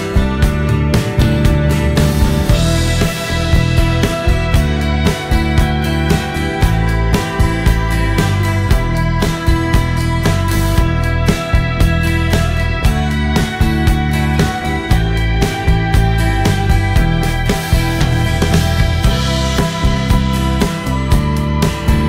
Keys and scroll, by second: 6.1-7.0 typing, 8.7 space, 18.7 Return.